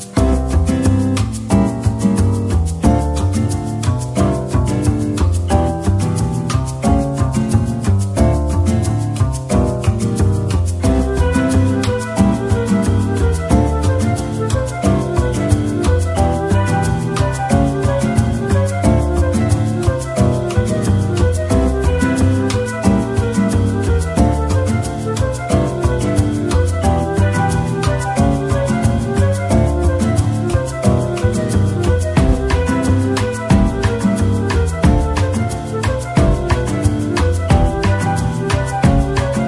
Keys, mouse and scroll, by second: 0.7-1.2 scroll down 1, 7.5 z, 10.5 scroll, 10.6 scroll down 1, 13.2 scroll up 1, 21.8 scroll down 1, 22.4 middle click, 24.5 scroll down 1, 35.8 middle click, 36.8 z, 37.7 middle click, 38.2 scroll up 1, 38.7 middle click, 39.3 scroll up 1.